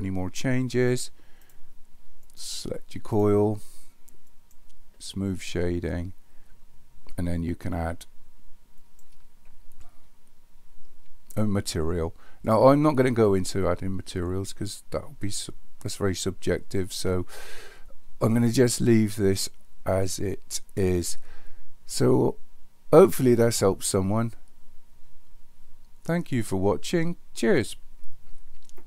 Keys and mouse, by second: 1.5-2.1 right drag, 2.3 click, 3.3 right click, 8.8 click, 9.9-10.2 middle drag, 10.8 middle drag, 12.9 middle click, 13.3-14.5 middle drag.